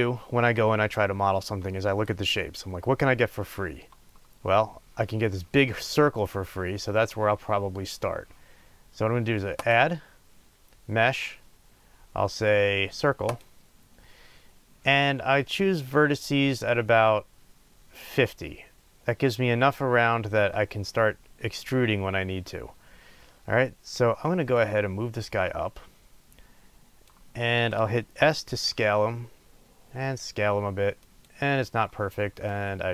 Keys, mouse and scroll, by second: 9.7-31.4 drag, 28.4 s, 32.4-32.9 drag.